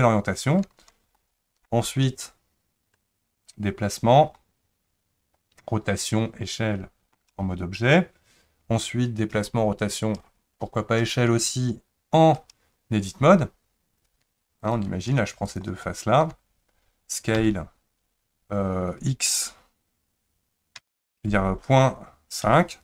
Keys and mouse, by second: 1.1 shift+middle click, 4.4-7.1 middle drag, 17.4 s.